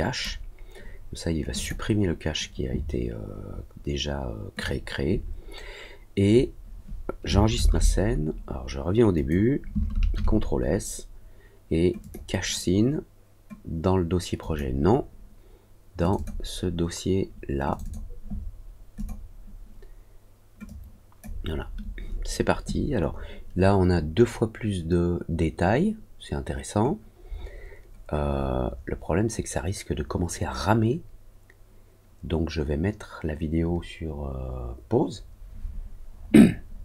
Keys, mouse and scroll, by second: 1.5 click, 4.5 click, 9.1 click, 11.9 click, 14.3 click, 15.9 click, 17.6 click, 17.8 click, 18.9 click, 20.6 click.